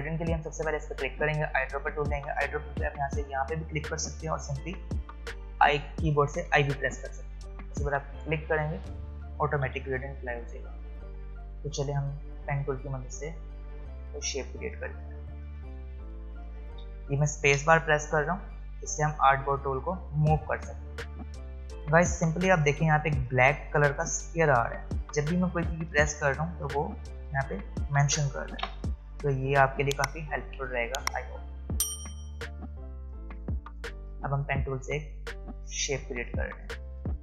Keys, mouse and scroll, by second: 6.5 i, 8.2 click, 9.7 v, 11.2 space, 12.5 click, 15.1 space, 15.4 click, 15.6 space, 24.0 space, 26.0 space, 27.1 f, 32.4 f, 32.5 click, 36.9 click.